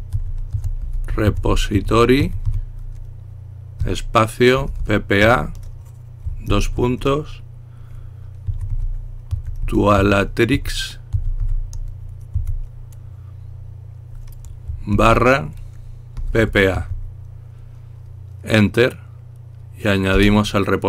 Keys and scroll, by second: 0.0-2.9 typing, 4.2-6.4 typing, 8.4-11.5 typing, 12.6 typing, 15.5-17.4 typing, 20.5 Return.